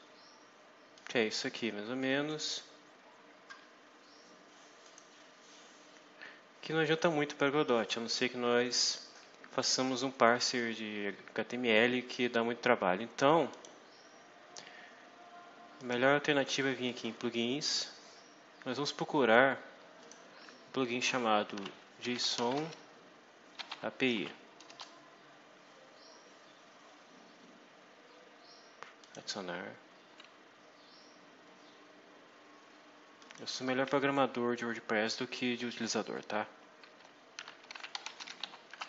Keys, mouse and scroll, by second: 0.8-2.4 drag, 2.6-3.0 scroll down 2, 4.7 click, 13.4 click, 15.7 click, 19.9 click, 21.2-24.6 typing, 24.6 Return, 28.9 click, 33.1 click, 37.0-38.8 typing.